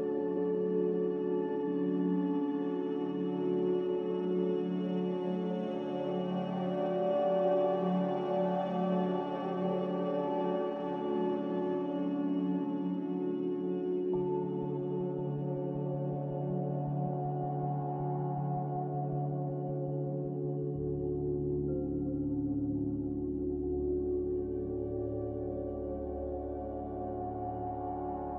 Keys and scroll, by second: 9.9-10.9 typing, 13.8-15.5 typing, 16.5 x, 24.7-25.6 typing.